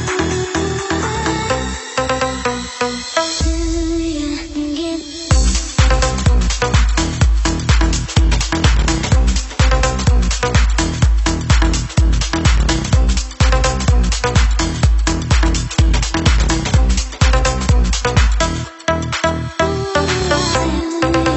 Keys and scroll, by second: 1.5 super+=, 1.5 super+Escape, 17.6-18.2 Up, 18.8 Up, 19.1 Up, 19.4 Up, 20.2 Up, 20.6 Up.